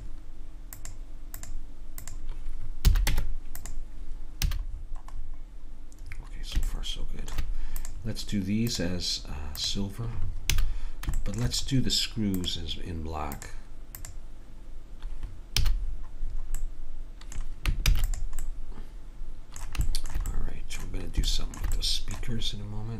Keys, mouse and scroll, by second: 0.0-2.2 drag, 2.9 a, 3.1 Tab, 4.4 a, 4.9-6.1 middle drag, 7.8 click, 10.5 a, 15.6 a, 17.9 ctrl+s.